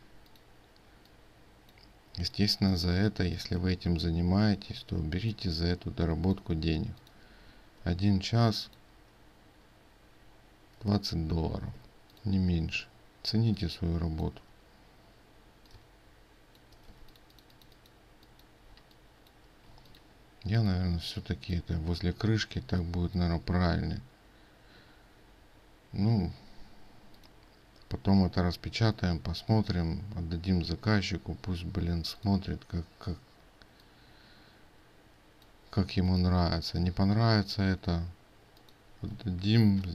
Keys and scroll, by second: 6.8 ctrl+space, 11.8 ctrl+space, 13.4 ctrl+space, 17.1 ctrl+space, 17.7 ctrl+alt+space.